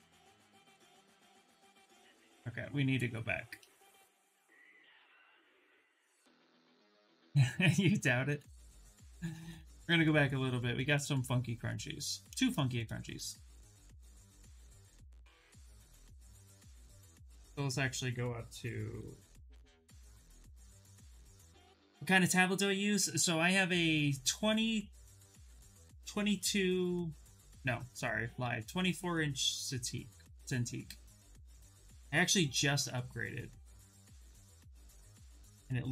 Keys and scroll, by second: 0.6 shift+f, 1.4 ctrl+z, 1.6 ctrl+z, 2.7 ctrl+z, 2.8 ctrl+z, 3.0 ctrl+z, 3.1 ctrl+z, 3.3 ctrl+z, 3.5 ctrl+z, 4.0 ctrl+z, 4.2 ctrl+z, 4.7 ctrl+z, 4.9 ctrl+z, 5.1 ctrl+z, 5.3 ctrl+z, 5.5 ctrl+z, 5.6 ctrl+z, 7.6 ctrl+z, 7.9 ctrl+z, 8.1 ctrl+z, 8.3 ctrl+z, 8.7 ctrl+z, 8.9 ctrl+z, 9.0 ctrl+z, 9.2 ctrl+z, 9.3 ctrl+z, 9.5 ctrl+z, 9.7 ctrl+z, 9.8 ctrl+z, 10.4 ctrl+z, 10.6 ctrl+z, 10.8 ctrl+z, 12.0 ctrl+shift+z, 16.5 2, 18.6 3, 19.3 0, 19.5 Return.